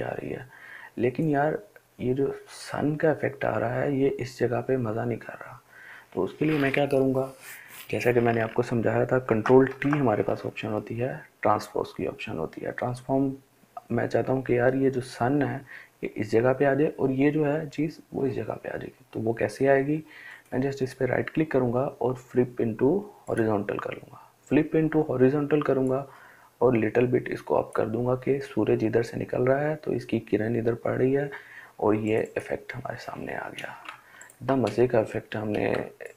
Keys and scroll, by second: 9.0 ctrl+t, 33.2 ctrl+space, 33.7 ctrl+space.